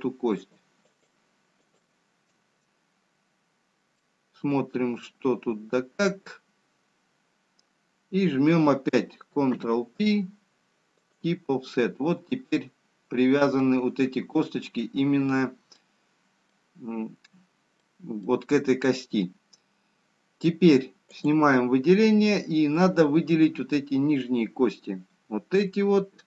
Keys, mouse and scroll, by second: 2.0 shift+click, 4.4 middle click, 9.9 ctrl+p, 13.1 middle click, 13.1 scroll up 1, 15.5 scroll down 2, 17.1 middle click, 18.3 middle click, 19.5 middle click, 23.9 click, 23.9 middle click, 23.9-24.9 scroll up 1.